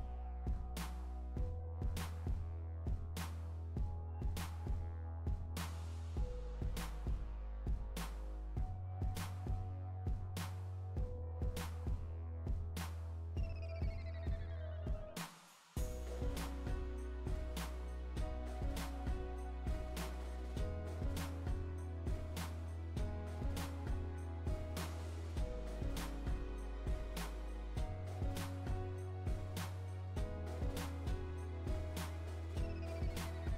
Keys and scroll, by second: 5.3 Return, 9.6 Return.